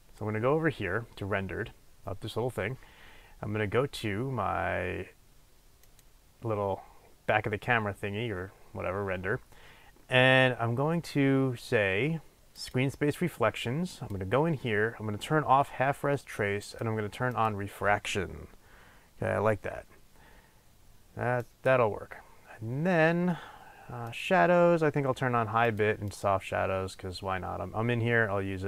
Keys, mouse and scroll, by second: 5.9-9.9 drag, 12.5-28.6 drag.